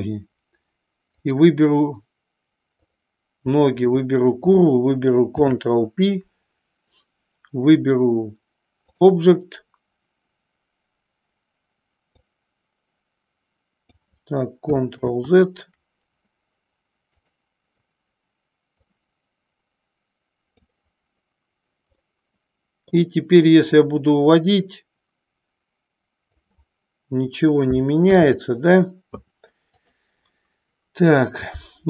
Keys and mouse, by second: 1.3 click, 3.8 shift+click, 5.3 ctrl+p, 12.2-14.1 drag, 15.3 ctrl+z, 19.0-20.7 drag, 22.2-23.0 middle drag, 23.8-26.5 drag, 28.1 ctrl+a, 30.2-31.4 middle drag.